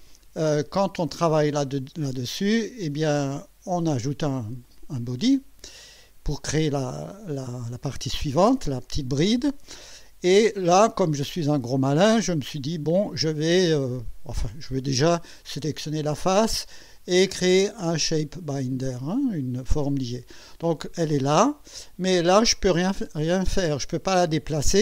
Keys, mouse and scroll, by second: 2.0 click, 4.6 click, 15.4 click, 17.6 click, 19.0 click, 20.0-20.6 scroll down 2, 21.5 click.